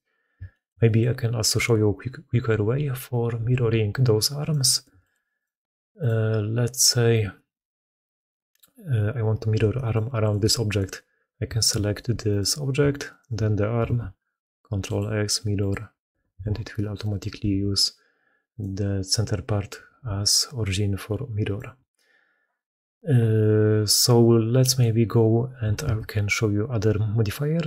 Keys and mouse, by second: 3.2 r, 4.7 x, 9.5 g, 10.1 click, 10.8 g, 11.8 g, 12.9 shift+click, 13.9 ctrl+x, 16.2 alt+a, 16.8 click, 17.2 r, 19.6 r, 24.5 click, 25.7 ctrl+x.